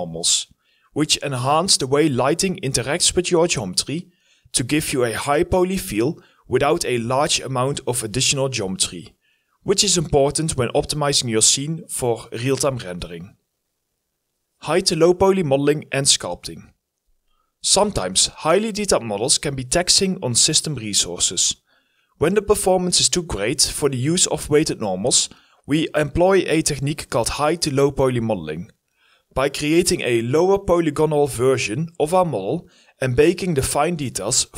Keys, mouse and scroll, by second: 0.5 scroll up 1, 0.7 scroll down 1, 2.1 h, 2.3 scroll up 1, 2.5 alt+middle click, 4.0 scroll down 1, 5.9 Tab, 9.8 alt+x, 10.2 scroll up 1, 10.3 alt+x, 12.0-12.4 scroll down 2, 12.1 Tab, 22.1-23.1 alt+scroll up 2, 22.2 alt+click, 22.3 alt+middle click, 23.3 alt+click, 23.9 alt+click, 24.3 scroll down 1, 26.1 alt+click, 29.4 alt+middle click, 29.7-30.2 scroll up 3, 30.0 alt+middle click, 30.4 scroll down 1, 31.1 alt+middle click, 31.2 alt+scroll up 1, 32.7 scroll down 1, 33.2 scroll up 1.